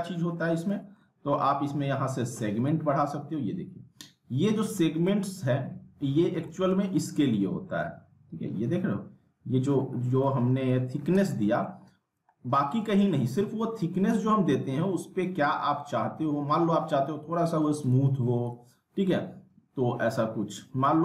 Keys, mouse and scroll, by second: 0.3-0.7 scroll up 1, 0.7 middle click, 2.7-5.2 drag, 6.0-6.5 scroll up 1, 6.5 middle click, 6.7 scroll down 1, 7.0-7.9 alt+middle drag, 8.5-10.0 scroll up 1, 10.0 scroll down 1, 10.2-11.2 alt+middle click, 11.2 z, 11.3 alt+middle click, 11.8-12.3 scroll up 1, 12.3 scroll down 1, 12.5 z, 12.9 alt+middle click, 13.3 scroll up 1, 17.8 click, 20.9 ctrl+z.